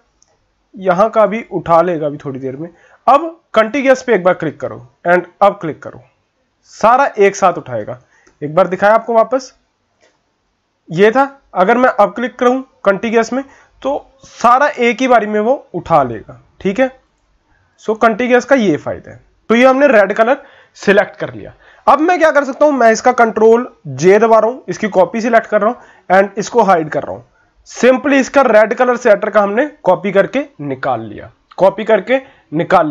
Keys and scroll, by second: 8.0 ctrl+z, 8.2 ctrl+z, 8.8 ctrl+z, 9.0 ctrl+z, 10.3 ctrl+z, 24.2 ctrl+j.